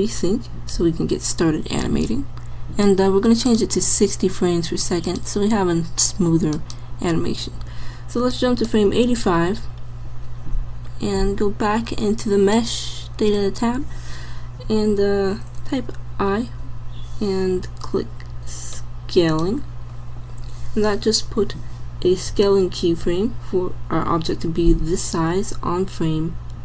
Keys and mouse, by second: 3.5-6.9 drag, 8.3-10.0 drag, 12.6-14.2 drag, 16.3 i.